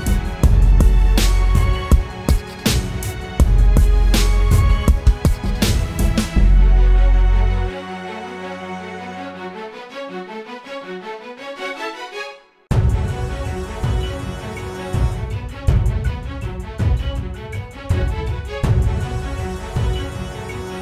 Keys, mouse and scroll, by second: 16.9 e.